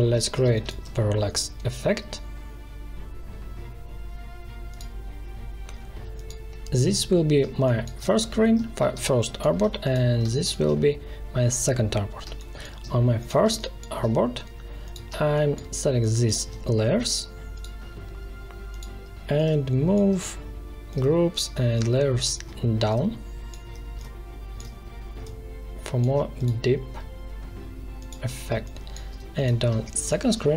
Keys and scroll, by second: 0.4 space, 7.3 space, 12.2 space, 28.4 space.